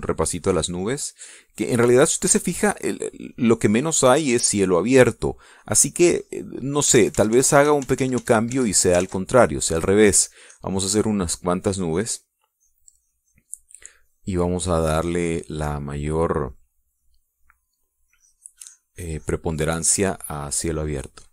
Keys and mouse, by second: 1.5 click, 2.3 click, 5.5-8.2 drag, 8.4 ctrl+z, 10.9 ctrl+click, 11.7-13.6 drag, 13.9-17.5 drag, 17.7 middle click, 18.2 middle click, 19.6-21.3 drag.